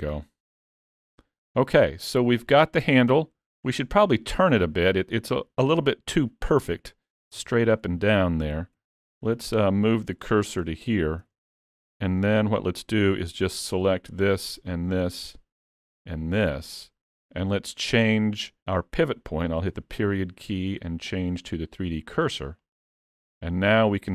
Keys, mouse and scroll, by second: 1.0 alt+a, 1.2 scroll down 2, 1.6 middle click, 2.4 shift+middle click, 3.1-3.7 scroll up 10, 3.8 shift+middle click, 4.2 middle click, 6.7 click, 7.3 Tab, 7.8-8.8 scroll up 2, 8.8-9.4 scroll up 2, 8.8 3, 9.4 click, 10.3 shift+s, 11.3 alt+a, 11.5 Tab, 12.4 Tab, 13.9 l, 14.6 l, 15.1-16.1 scroll down 3, 16.1 l, 16.6-17.4 scroll down 3, 23.4 middle click.